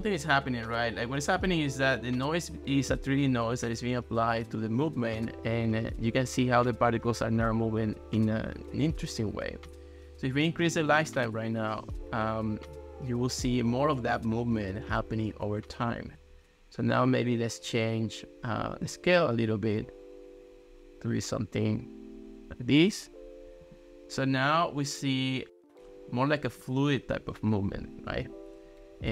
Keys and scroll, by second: 11.0 2, 11.3 Return.